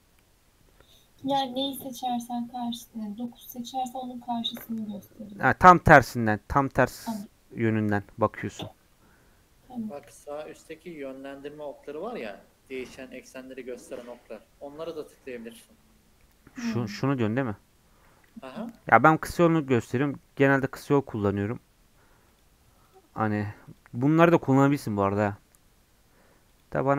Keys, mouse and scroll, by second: 10.0 KP_1, 18.3 n, 21.3 click, 22.3 click, 23.2 click, 23.7 click, 24.3 click, 26.5-26.9 drag.